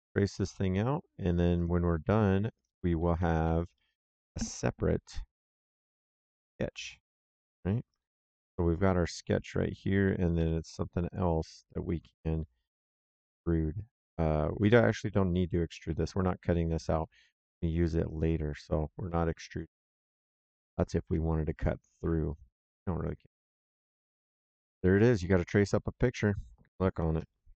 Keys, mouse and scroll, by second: 0.2 click, 1.5 click, 3.1 Escape, 3.7 middle click, 5.3 click, 7.1 click, 7.8 right click, 10.3 s, 11.0 click, 18.4 click, 19.0 middle click, 19.4 right click, 20.9 alt+Tab, 23.5 alt+Tab, 25.3 middle click.